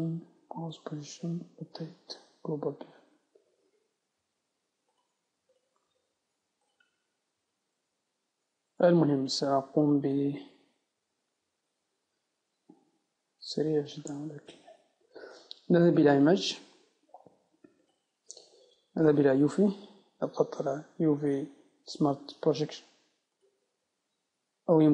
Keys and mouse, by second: 7.5 middle click, 10.2-11.8 middle drag, 18.0-20.8 drag, 19.2 Tab, 20.8 u, 24.5 u.